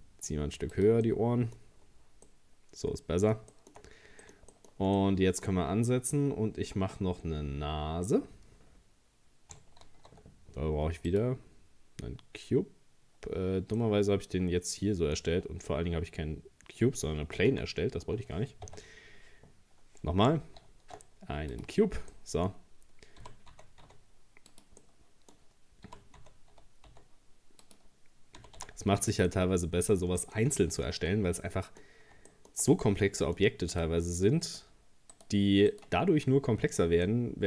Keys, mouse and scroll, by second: 1.1 middle click, 1.8-2.3 scroll down 1, 2.3-3.9 middle drag, 3.9 scroll up 1, 4.2-8.0 middle drag, 9.8 shift+a, 13.8-15.2 middle drag, 15.2-15.7 scroll down 2, 16.0 scroll down 3, 17.5 ctrl+z, 18.7 Tab, 20.6 shift+a, 22.1-23.2 middle drag, 23.2 g, 24.8-25.9 middle drag, 25.9 g, 28.4 g, 29.3-30.5 middle drag, 30.5 scroll up 1, 31.0 Tab, 31.4-33.7 middle drag, 33.7 right click, 34.5 shift+right click, 35.2 shift+right click, 35.7 shift+right click, 37.1-37.4 middle drag.